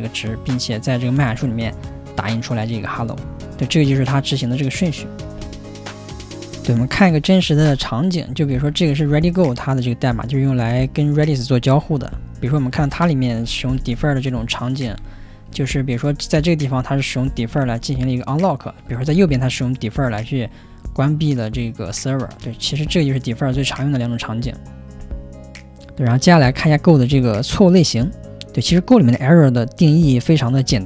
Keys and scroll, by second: 7.3-13.6 typing, 14.8-23.5 typing.